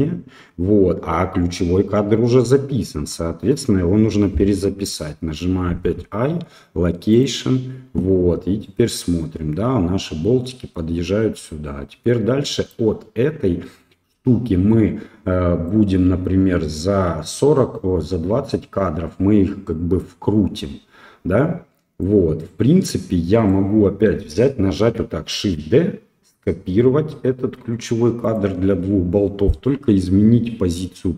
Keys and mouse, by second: 8.6-12.7 right drag, 15.7-22.0 right drag, 23.4 right click, 25.3 shift+d.